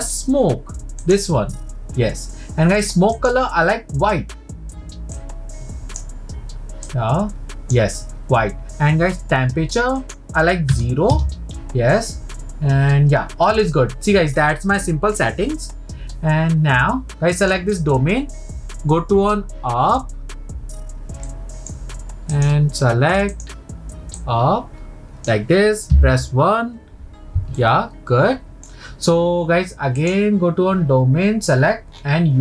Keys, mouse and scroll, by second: 3.2 click, 10.0-13.0 drag, 17.4 click, 18.2-20.1 scroll down 1, 21.3-22.3 middle drag, 22.3-24.3 drag, 27.6-30.0 middle drag, 30.0 click, 31.6-32.4 scroll down 19.